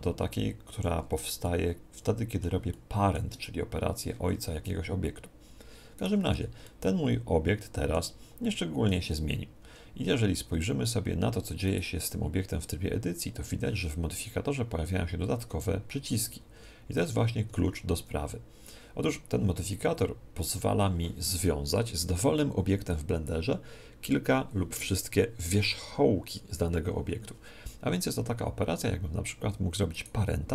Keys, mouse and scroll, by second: 1.4-4.6 middle drag, 6.0 right click, 6.4 Tab, 6.6-10.2 middle drag, 7.6 click, 8.0 Tab, 9.6 Tab, 11.7 right click, 13.0 Tab, 14.8 Tab, 15.5 Tab, 16.0 Tab, 16.6 Tab, 17.0 Tab, 17.5 Tab, 18.0 Tab, 30.0 right click.